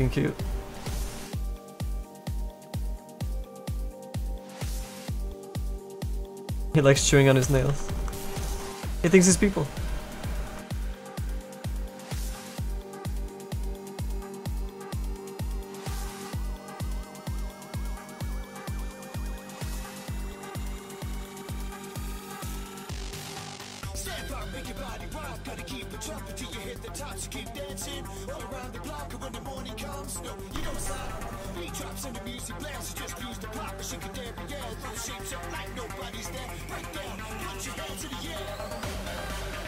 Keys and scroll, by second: 3.7 s, 5.0 s, 7.5 ctrl+z, 7.7 ctrl+z, 24.6 s, 25.5 s, 30.3 s.